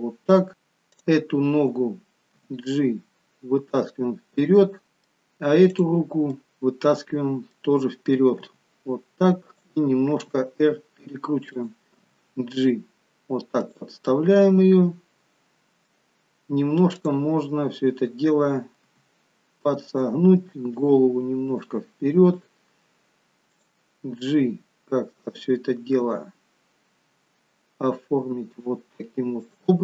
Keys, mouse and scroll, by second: 0.8 click, 2.3 g, 4.9 middle click, 5.7 click, 6.4 middle click, 8.4 g, 10.2 r, 12.1 g, 14.1 middle click, 16.9 click, 18.9 r, 20.7 click, 21.5 r, 23.5 click, 26.0 g.